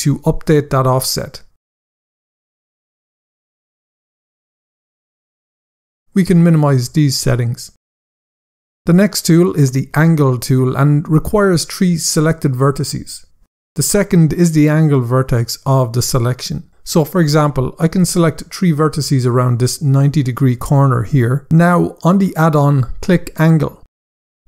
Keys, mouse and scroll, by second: 0.4 right click, 2.1 click, 7.0 click, 8.7 scroll up 1, 16.8 click, 18.0 shift+click, 19.4 shift+click, 23.1 click.